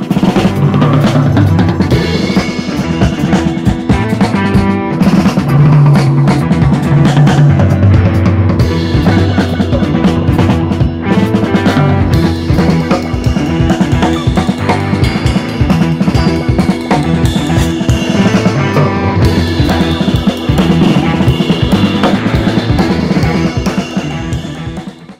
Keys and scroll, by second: 3.3 Page_Up, 3.5 Page_Up, 3.6-4.3 typing, 8.9 BackSpace.